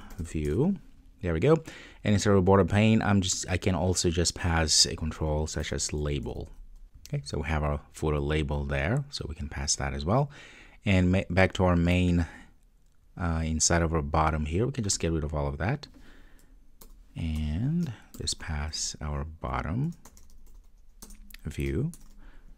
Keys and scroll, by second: 21.1 Return.